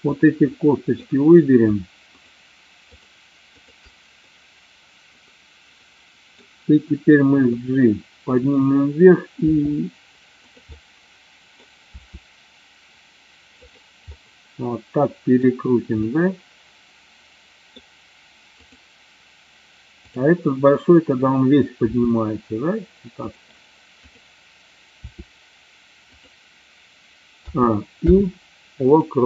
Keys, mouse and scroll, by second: 0.2-0.7 drag, 1.2 middle drag, 2.9-3.5 shift+drag, 3.7-4.2 shift+drag, 4.3-6.4 middle drag, 7.7 click, 9.5 r, 10.9 middle click, 12.0 r, 13.7 click, 14.2-15.4 middle drag, 16.2-17.8 middle drag, 18.7 click, 21.9 r, 24.0 click, 25.2 r, 26.2 click, 27.4 a, 28.0 i.